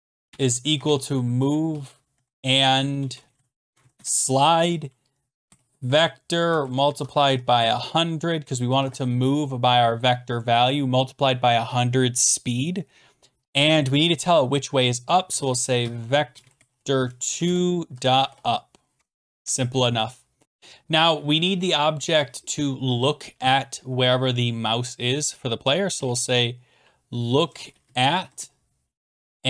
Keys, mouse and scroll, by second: 0.1-3.9 typing, 3.9 Return, 5.0-7.6 typing, 8.7 ,, 11.1-11.9 typing, 15.0-18.8 typing, 17.3 Down, 17.4 Return, 19.0 Tab, 19.1 Right, 19.4 Return, 20.4-23.2 drag, 25.9-26.6 typing, 27.8 Down, 28.0 Down, 28.2 Down, 28.3 Return.